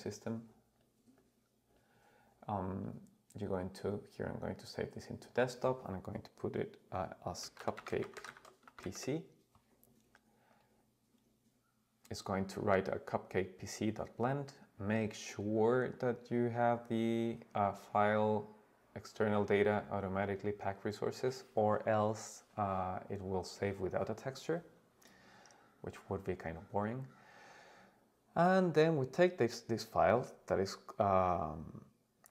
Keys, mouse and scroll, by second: 16.6-22.7 drag, 23.1 click.